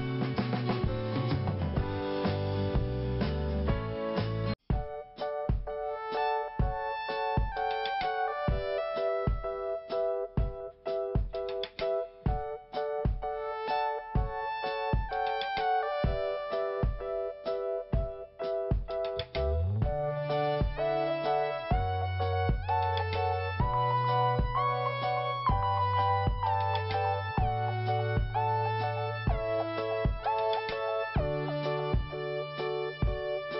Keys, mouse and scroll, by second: 2.3 click, 3.9-4.2 scroll down 1, 4.9 click, 7.0 click, 8.1 scroll down 1, 10.5 click, 13.6-13.9 scroll up 1, 15.2 click, 15.7 click, 16.8 click, 18.6 scroll up 1, 19.4 click, 19.7 click, 19.8 double click, 20.3 double click, 22.5 click, 23.1 click, 25.4 click, 27.9 click, 28.6 click, 30.1-30.5 scroll down 1, 32.6 click, 33.2 click.